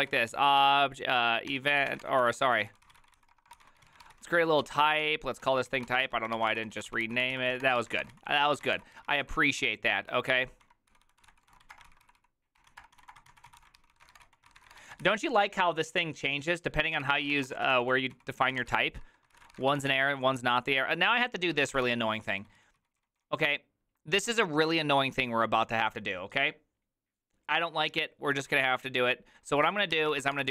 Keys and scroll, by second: 0.0-15.6 typing, 17.1 ctrl+c, 17.1-20.4 typing, 21.6 ctrl+c, 21.7 typing, 21.9 Return, 22.0 ctrl+u, 22.1 ctrl+u, 22.5 ctrl+u, 29.9-30.5 typing.